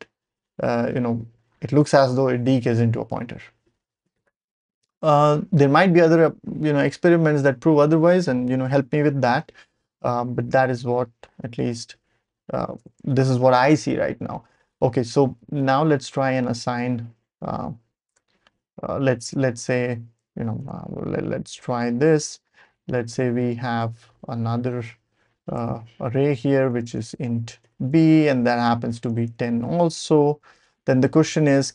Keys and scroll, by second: 3.3 BackSpace, 4.0 ctrl+alt+super+p, 11.2 Page_Up, 11.4 Page_Up, 12.0 Page_Up, 12.8 Return, 13.9 Page_Down, 14.1 Page_Down, 14.5 Page_Up, 14.8 Page_Up, 15.2 Page_Down, 15.4 Page_Down, 15.5 Page_Down, 15.8-16.5 typing, 16.8 Down, 17.3 Up, 17.5 Up, 17.6 typing, 18.1 Return, 19.2-23.5 typing, 23.7 Down, 24.1 Down, 25.6 Tab, 26.3-30.7 typing, 28.4 Left, 29.9 Right, 31.2 Return.